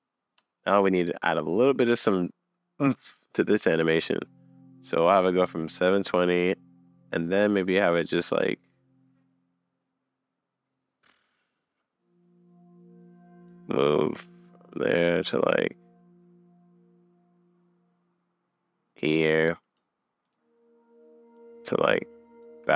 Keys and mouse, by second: 12.4-13.5 middle drag, 14.6 shift+middle click, 19.2 middle click, 20.3-21.3 middle drag.